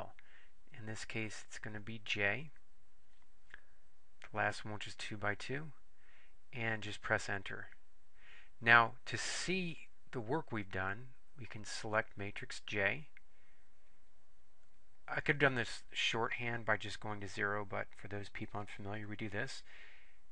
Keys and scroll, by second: 2.4 Up, 4.5 Return, 7.1 Return, 14.1 Up, 17.3 Return, 19.7 Return.